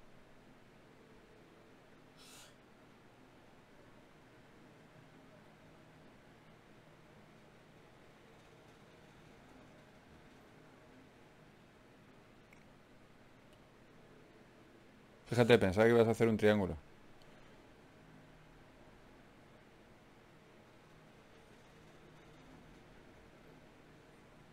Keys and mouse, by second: 1.0 ctrl+Tab, 2.2-3.6 drag, 3.6 g, 4.7-5.9 drag, 4.9 g, 6.1 g, 10.0 alt+m, 13.6 alt+m, 15.6 click, 16.3 g, 16.9-18.7 drag, 17.5 g, 19.1 g, 20.5 g, 21.5 n, 23.5 click, 23.9 n, 24.3-24.5 drag.